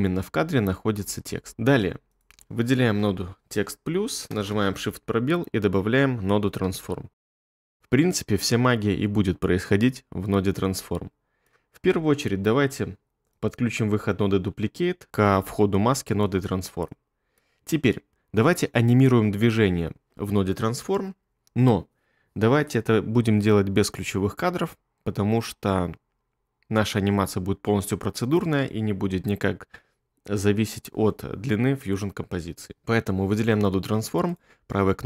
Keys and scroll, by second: 4.3 space, 6.4-7.8 typing.